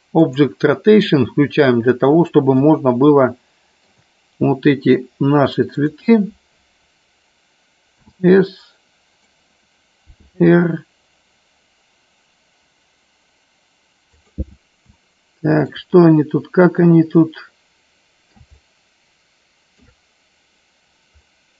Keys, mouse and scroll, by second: 0.2 click, 2.6-3.9 shift+middle drag, 5.6 click, 10.1 r, 14.1 click, 15.0-15.9 shift+middle drag, 17.2-19.9 middle drag, 21.2-21.5 middle drag.